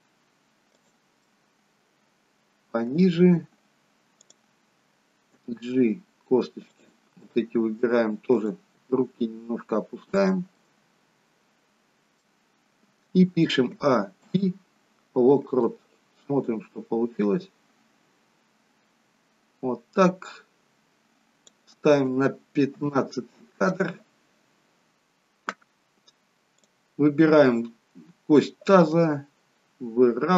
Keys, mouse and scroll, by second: 1.3 middle click, 4.2 click, 5.3 g, 7.2 middle click, 8.3 click, 8.8 g, 10.7 middle click, 13.9 a, 14.3 i, 17.4 click, 22.8 KP_3, 26.6 click, 28.9 g.